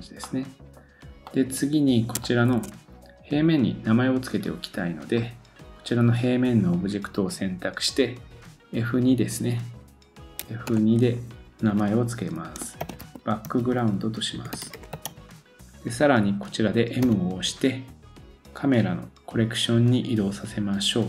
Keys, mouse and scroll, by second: 0.3 middle click, 0.8-1.3 scroll down 1, 1.3 middle click, 2.2 shift+middle click, 5.1 click.